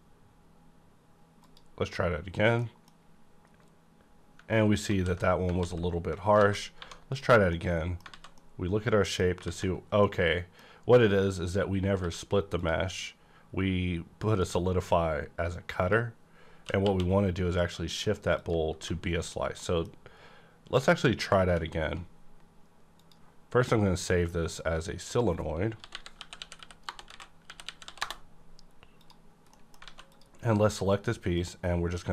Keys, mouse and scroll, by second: 0.0 click, 0.0 scroll down 1, 0.4-1.4 scroll up 1, 1.4 click, 2.6 middle click, 2.6 click, 4.9 z, 5.6 z, 6.4 a, 6.8 1, 7.1 click, 7.8 middle click, 8.1 alt+z, 9.4 z, 9.9-12.5 middle drag, 12.0 q, 12.5 click, 13.0 scroll down 1, 13.8-14.3 scroll up 1, 14.3 click, 15.8 click, 16.7 q, 17.9 click, 17.9 click, 17.9 q, 18.7 h, 19.2 click, 19.6 middle click, 19.6 middle click, 20.9 ctrl+s, 23.0 click, 23.0 click, 24.4 click, 25.7-27.8 typing, 28.0 Return, 28.9 click, 29.5 middle click, 29.8 alt+a, 30.1 click, 31.4 click.